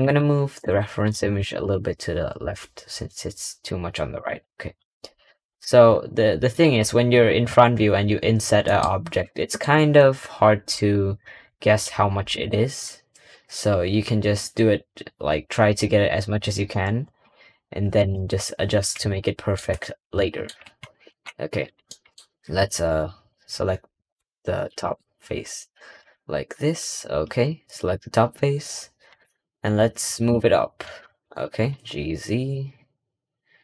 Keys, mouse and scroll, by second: 0.5 click, 5.0 scroll up 1, 5.4 click, 5.9-6.4 scroll up 2, 6.6 middle click, 6.7-8.5 scroll down 19, 8.5 middle click, 8.7 scroll up 2, 9.3-9.7 shift+middle drag, 10.0-10.6 scroll up 3, 10.6-11.4 scroll down 2, 11.4-12.2 middle drag, 12.2 click, 12.5-13.0 scroll up 2, 13.0-14.2 scroll down 1, 14.2-16.1 scroll down 1, 16.1-17.7 scroll up 1, 17.9 click, 18.2-19.0 scroll up 4, 19.0 shift+middle drag, 20.1 middle drag, 21.7 middle click, 22.2-23.7 scroll down 10, 23.7-24.5 scroll up 2, 24.5 ctrl+KP_Subtract, 25.2-25.9 scroll up 1, 25.9 KP_Decimal, 27.8-28.4 scroll down 3, 29.0 click, 29.5 scroll down 5, 30.0 middle click, 30.9-33.6 middle drag.